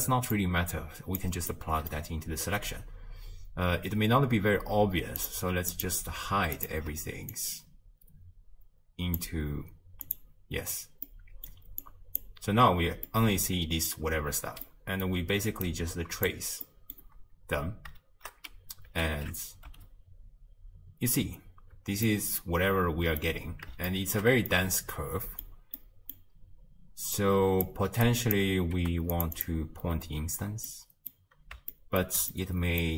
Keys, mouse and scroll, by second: 2.9-5.9 middle drag, 5.9 click, 6.7 shift+click, 10.2 click, 11.8-13.2 drag, 13.2-15.7 middle drag, 15.7-16.3 drag, 19.1 alt+q, 19.7 space, 21.8 space, 22.1-27.2 middle drag, 27.2-28.3 drag, 29.4-30.9 drag, 30.9-32.9 middle drag.